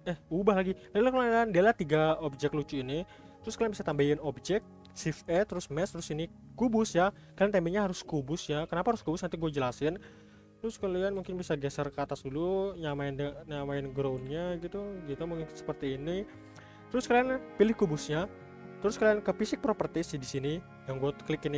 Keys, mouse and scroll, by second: 2.3 Delete, 4.0 shift+a, 7.1-8.4 scroll up 6, 8.4-9.1 scroll down 2, 9.1-11.2 middle drag, 11.2 g, 12.4-13.1 scroll up 4, 13.1-14.2 middle drag, 14.2 g, 15.5-15.9 middle drag, 15.9-16.4 scroll down 3, 16.4-17.6 middle drag, 17.6 click, 17.7 click, 18.2 click, 20.1 click, 20.4 click, 20.6 click, 20.9 click, 21.3-21.5 drag.